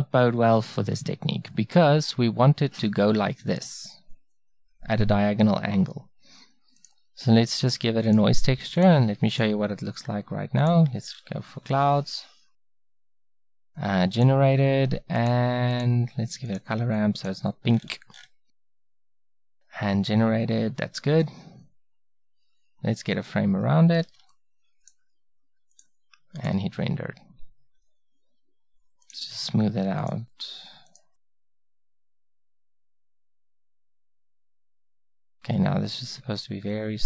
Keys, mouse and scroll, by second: 6.8-16.0 drag, 24.2 ctrl+b, 25.7-27.7 drag, 29.1-32.0 drag, 32.9-36.0 drag.